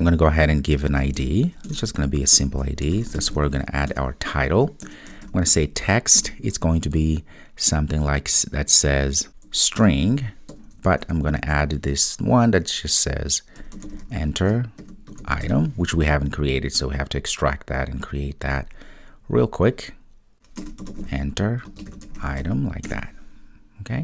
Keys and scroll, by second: 1.7 Return, 9.9 Return.